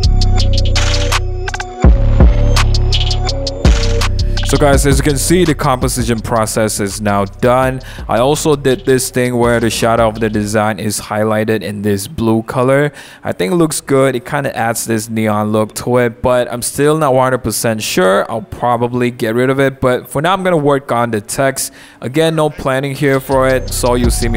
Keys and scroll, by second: 1.1-3.5 typing, 16.2 t, 20.9 u, 21.9 super+t.